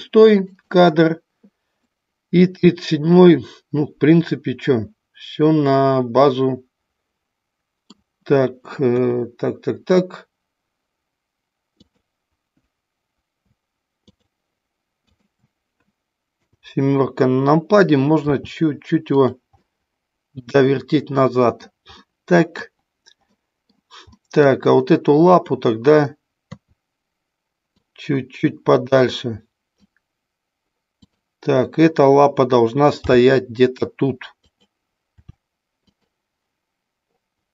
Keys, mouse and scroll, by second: 0.4 click, 1.9-7.9 middle drag, 8.9 KP_1, 11.7-12.8 drag, 14.0 shift+click, 16.3 KP_7, 18.3 r, 19.2 click, 19.5-21.5 middle drag, 22.1 middle click, 23.3 middle click, 24.1 middle click, 25.2 click, 26.5 KP_3, 27.8-29.9 drag, 33.0 g, 34.5 click, 35.0 r, 35.9 click.